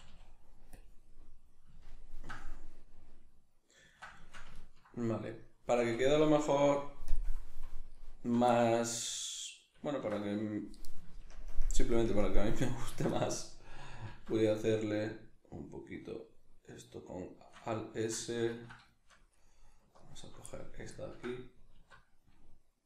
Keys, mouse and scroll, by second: 0.8 click, 1.1-7.1 middle drag, 5.8 Tab, 7.1 click, 8.0 alt+right click, 8.5-17.7 middle drag, 11.3 ctrl+KP_Add, 12.0 ctrl+KP_Subtract, 14.1 alt+s, 17.7 right click, 18.1-19.9 shift+middle drag, 19.9 alt+right click, 20.5-22.8 middle drag, 21.7 alt+s.